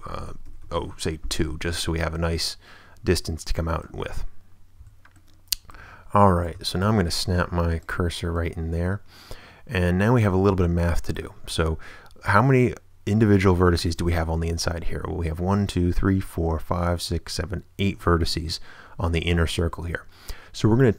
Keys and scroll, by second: 0.4 2, 0.6 Return, 4.8 a, 5.8 Tab, 6.5 shift+Tab, 6.9 shift+s.